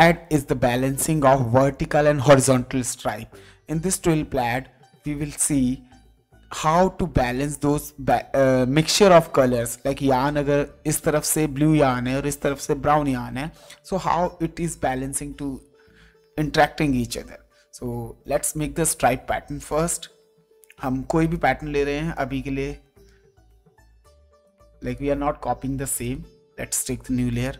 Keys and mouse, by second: 20.4 ctrl+Tab, 21.3 click, 24.4 click, 26.0 click.